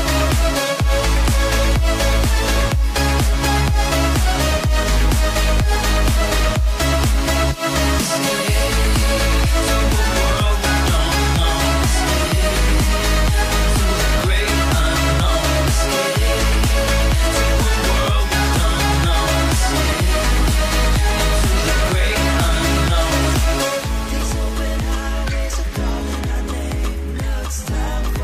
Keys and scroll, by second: 5.5 Tab, 6.3 Tab.